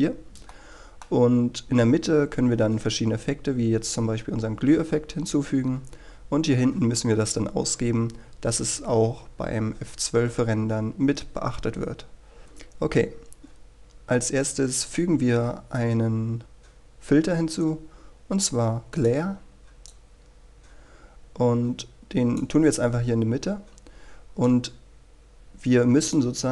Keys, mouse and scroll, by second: 0.5-1.7 middle drag, 14.9-26.5 drag.